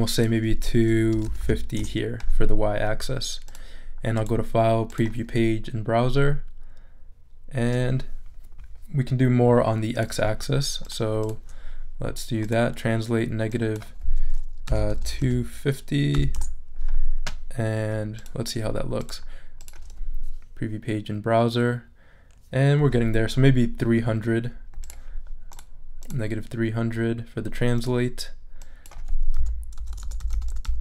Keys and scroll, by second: 0.9-1.9 typing, 14.4-16.1 typing, 16.4 Return, 29.3-30.8 typing.